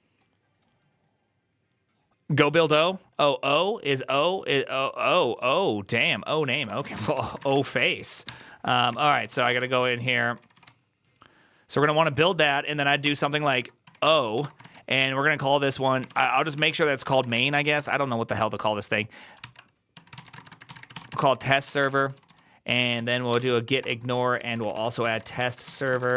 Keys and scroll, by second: 6.6 alt+{, 6.6 ctrl+a, 6.8 1, 7.0 ctrl+c, 7.1 ctrl+c, 7.3 ctrl+:, 7.3 w, 7.4 Return, 7.6 b, 8.1 ctrl+h, 8.6 ctrl+t, 8.8 ctrl+n, 9.0-18.3 typing, 19.3 ctrl+c, 19.5-26.1 typing, 22.8 ctrl+p.